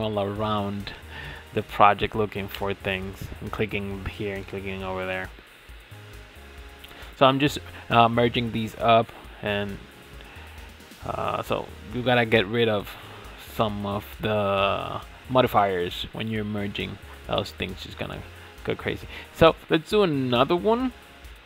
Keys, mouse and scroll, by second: 1.0 ctrl+j, 1.7 click, 2.1 scroll up 4, 2.4-3.1 middle drag, 3.1 click, 3.6-4.0 scroll up 5, 4.0-5.8 shift+middle drag, 5.8 ctrl+z, 6.3 ctrl+z, 6.7 ctrl+z, 7.2-7.6 scroll down 5, 7.6 click, 8.2 ctrl+s, 8.4-8.8 scroll down 4, 8.8-9.9 shift+middle drag, 9.9 click, 10.4 shift+middle click, 11.3 click, 12.1-12.8 shift+middle drag, 12.8 click, 13.8 h, 15.2 click, 15.8 shift+s, 19.9 shift+s.